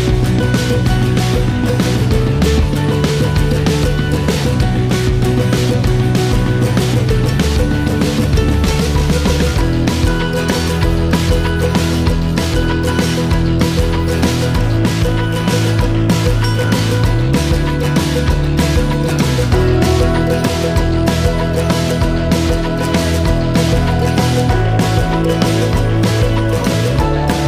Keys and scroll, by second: 23.0 typing.